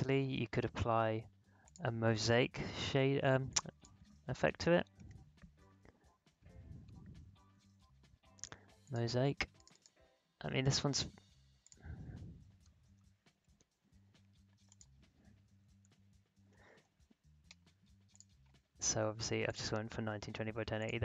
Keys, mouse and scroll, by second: 1.6 click, 4.2-5.5 typing, 8.8 click, 12.2-13.4 typing, 14.6 click, 15.3-17.4 typing, 18.1 click.